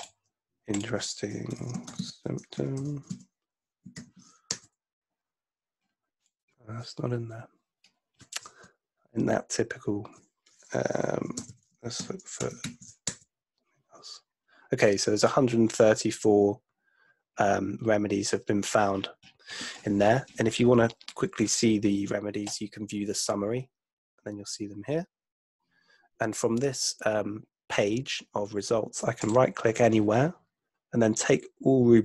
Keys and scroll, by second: 1.2-4.0 typing, 4.5 Return, 8.7 BackSpace, 11.0-12.9 typing, 13.0 Return.